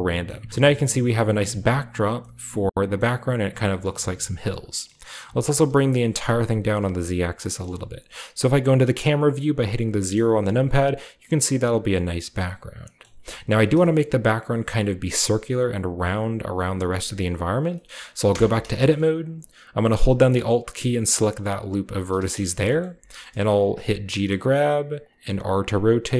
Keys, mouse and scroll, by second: 0.3-1.3 scroll up 1, 0.5 Tab, 0.7 g, 1.3-2.9 drag, 1.5 Tab, 1.5 scroll down 1, 1.6-2.9 scroll up 1, 3.2-4.5 scroll up 1, 3.5 g, 3.9 z, 4.5-5.4 drag, 4.8-6.2 scroll up 1, 5.2 g, 5.5 z, 6.6-8.0 drag, 6.8 a, 6.8-8.0 scroll down 1, 9.9 KP_0, 12.6-14.9 scroll down 1, 12.8 middle click, 13.7 shift+middle drag, 17.0 shift+middle click, 17.3 click, 17.5-19.1 shift+right drag, 17.8-18.2 shift+scroll up 2, 18.3 Tab, 21.4 alt+right click, 22.2 scroll down 2, 22.4 shift+middle click, 23.2-24.8 shift+scroll down 2, 23.8 g, 24.9 click, 25.2 r.